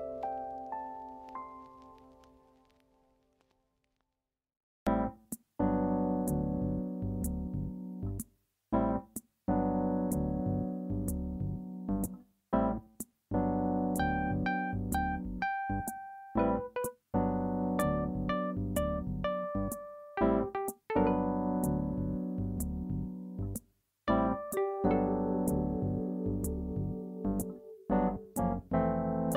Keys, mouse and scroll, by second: 1.0 click, 2.5 click, 3.3 s, 5.6 click, 7.1 click, 9.1 click, 11.3 click, 14.6-17.6 shift+drag, 19.9 click, 21.0 Tab, 21.9 click, 23.1-24.7 drag.